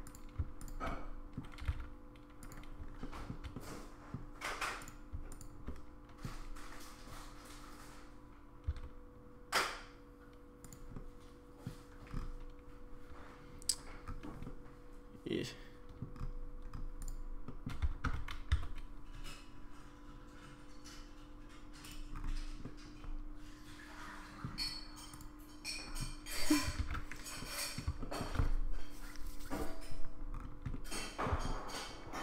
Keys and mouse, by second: 0.0 click, 0.9 middle click, 1.6 g, 3.0 shift+middle click, 3.5 middle click, 5.4 shift+click, 5.6 middle click, 8.7 s, 10.9 middle click, 14.4-16.0 middle drag, 17.5 middle click, 18.0 Tab, 18.9 s, 22.6-24.4 middle drag, 24.6-25.2 right drag, 26.9 ctrl+z, 27.4-27.8 middle drag, 28.0 middle drag, 30.7-31.2 middle drag, 31.5-32.2 shift+middle drag.